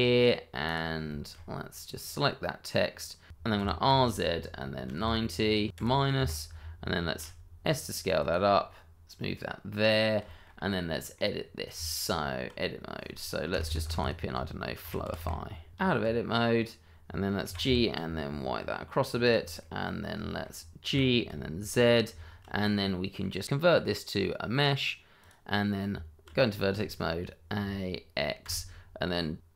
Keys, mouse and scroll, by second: 0.6 click, 1.1 shift+middle click, 1.3-1.7 scroll up 1, 2.0 click, 3.3 Escape, 3.5 r, 3.9 z, 4.8 KP_9, 5.0 KP_0, 5.7 KP_Subtract, 6.1 KP_Enter, 6.8 scroll down 1, 7.2 s, 8.2 click, 9.5 g, 10.5 click, 10.9 shift+middle click, 11.0 scroll up 1, 11.2 middle click, 11.6 scroll down 1, 11.8 Tab, 13.5 BackSpace, 14.7 shift+f, 15.2 shift+o, 15.4 shift+i, 15.7 click, 15.9-16.5 scroll down 1, 16.5 Escape, 16.9 Tab, 18.1 g, 18.3 y, 19.4 click, 19.6 middle click, 20.2 shift+middle click, 20.8 g, 21.3 z, 21.8 click, 22.1-22.5 shift+scroll up 1, 22.8 middle click, 23.4 right click, 25.2 click, 25.9 Tab, 26.7 a, 28.4 x.